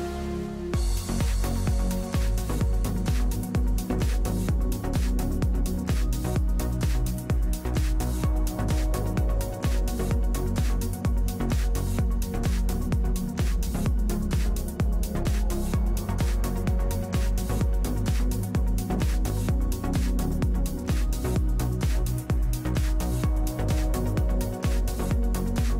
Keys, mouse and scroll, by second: 2.4 Tab, 3.2 Tab, 5.2 KP_7, 5.7 z, 7.5 z, 8.5 middle click, 9.2 a, 9.9 middle click, 16.5 KP_1, 16.9 KP_3, 17.2 z, 17.8 KP_1, 19.1 KP_7, 21.8 z, 25.1 w.